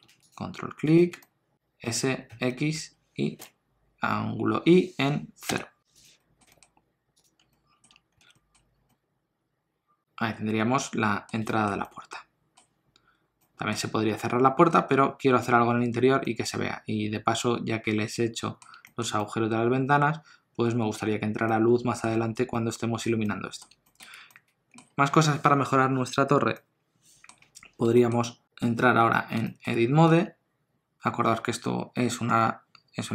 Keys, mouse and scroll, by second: 0.2 ctrl+click, 1.2 middle click, 1.5 s, 1.8 s, 6.2 middle click, 6.5 g, 7.4 scroll down 1, 7.5 middle click, 7.9 Tab, 8.1-8.7 scroll down 2, 8.2 alt+a, 8.3 middle click, 8.9 middle click, 11.5 shift+middle click, 11.8 middle click, 12.8-13.2 scroll up 2, 13.3 middle click, 18.8 shift+middle click, 19.1 middle click, 22.1-22.4 scroll down 1, 22.5 ctrl+middle click, 23.2 middle click, 23.8 shift+middle click, 24.3 ctrl+middle click, 26.5 middle click, 27.9 shift+middle click, 28.2 middle click, 28.7 click, 29.4 shift+middle click, 30.1 Tab, 32.3 Tab.